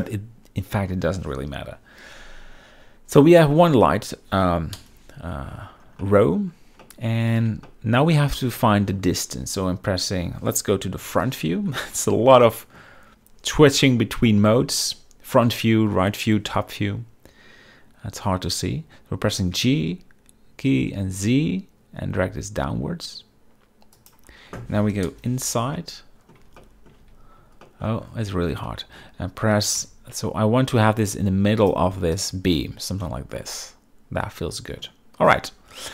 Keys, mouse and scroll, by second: 0.0 shift+click, 3.6-4.0 middle drag, 3.6 KP_7, 5.4 KP_0, 5.4 z, 6.1 shift+middle drag, 6.9-7.5 middle drag, 7.8 shift+middle drag, 8.7-9.1 shift+middle drag, 11.1 KP_1, 11.8 z, 12.5 shift+middle click, 19.6 g, 21.0 z, 25.2 KP_0, 25.9-26.4 middle drag, 26.7 shift+middle click, 27.1 z, 27.8 shift+middle click, 28.8-29.1 shift+middle drag, 29.6 g, 29.9 z, 32.3 click, 33.5-34.9 middle drag.